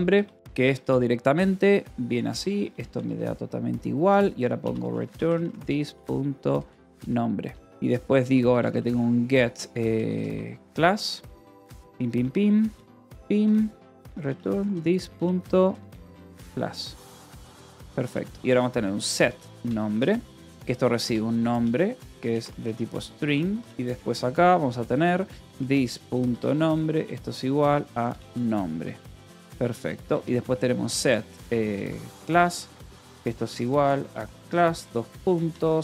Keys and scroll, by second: 0.0-2.7 typing, 2.9 Return, 4.2-10.8 typing, 6.8 Escape, 12.0-23.1 typing, 12.8 Return, 23.5 Return, 24.9-30.2 typing, 31.3-35.8 typing.